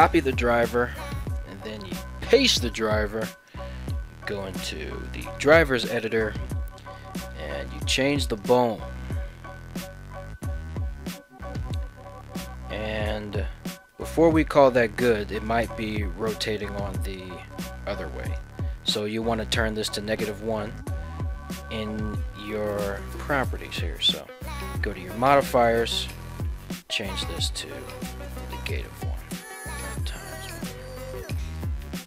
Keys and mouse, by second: 1.0-2.4 right drag, 3.4-5.2 right drag, 14.0 middle click, 15.5 right click, 16.3 ctrl+Tab, 16.7 right click, 17.0 middle click, 17.6 r, 18.3 right click, 20.5 ctrl+Tab, 20.7 right click, 23.0-23.7 right drag.